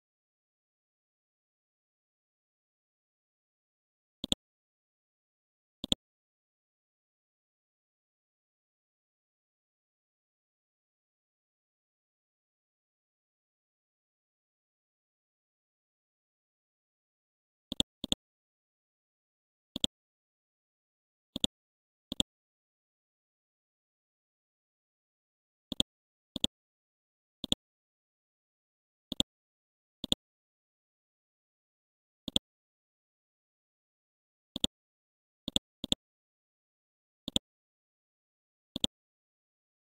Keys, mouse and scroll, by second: 0.0-0.3 typing, 1.1 Return, 1.6-2.8 typing, 3.2 ctrl+a, 4.2 click, 4.5 typing, 5.1 Return, 5.8 click, 7.3-13.1 typing, 14.3-15.7 typing, 16.4 scroll down 1, 17.7-22.1 drag, 22.8 ctrl+z, 25.7 click, 30.8 scroll up 1, 31.5-32.3 scroll down 1, 32.3 click, 36.1 scroll down 1, 36.7-37.3 scroll up 1, 37.3-39.9 drag.